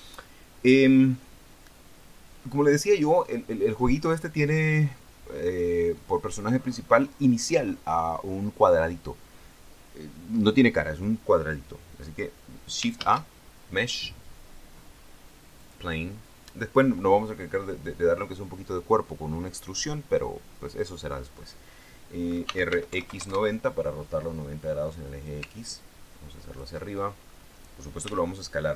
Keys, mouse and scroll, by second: 13.3 shift+a, 15.9 click, 22.8 r, 23.1 x, 23.3 KP_9, 23.5 KP_0, 25.9-27.1 ctrl+drag, 27.3-27.9 ctrl+scroll up 3, 28.4 s.